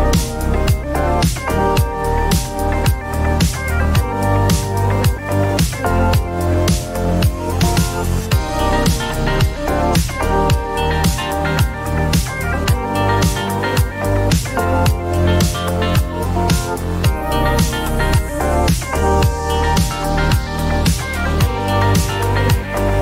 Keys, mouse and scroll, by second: 1.8 click, 2.5-3.0 typing, 2.9 Return, 5.2 click, 8.2 click, 9.4-11.1 typing, 9.8 click, 14.6 click, 17.0 click, 18.0-20.9 typing, 18.9-23.0 drag, 21.9 typing.